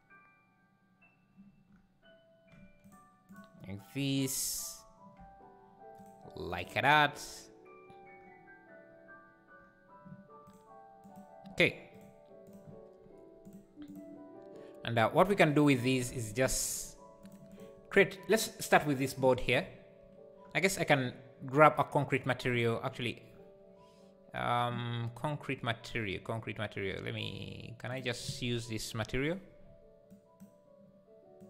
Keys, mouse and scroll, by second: 17.5 click, 19.5 click, 28.0 shift+click, 30.4 ctrl+l.